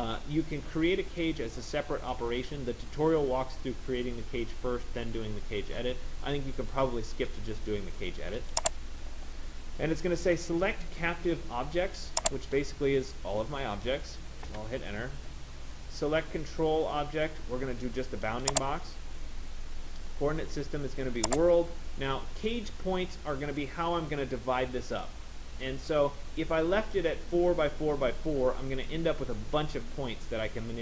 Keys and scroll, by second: 14.3 Return.